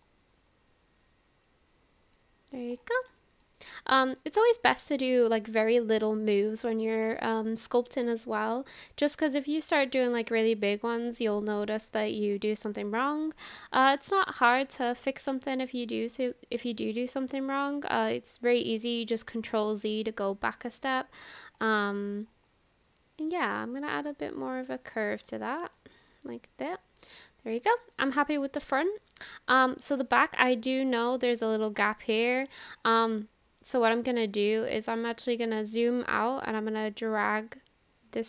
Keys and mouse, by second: 0.4-1.5 drag, 2.2 middle click, 3.1 shift+middle click, 3.6 middle click, 4.6 shift+middle click, 5.1-7.4 middle drag, 9.8-11.0 drag, 11.9 ctrl+z, 12.7-13.8 middle drag, 14.2-15.4 middle drag, 17.0-18.2 drag, 18.9 ctrl+z, 19.6-21.5 middle drag, 22.0 shift+middle click, 23.0-24.8 drag, 25.4 shift+middle click, 26.1-28.0 drag, 26.1-28.0 right drag, 28.4 click, 28.4 right click, 29.7 click, 29.7 right click, 30.6 click, 30.6 right click, 31.3 shift+middle click, 31.9 middle click, 33.0-34.9 middle drag, 36.3-38.2 drag.